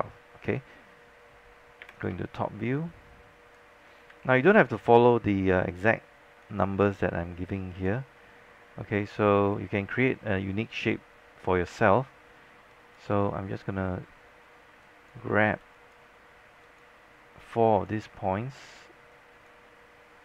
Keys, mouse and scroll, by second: 1.9 space, 4.1 scroll down 1, 4.3 alt+click, 6.5-8.5 drag, 10.9 right click, 12.8 click, 16.7 shift+click, 19.2 click.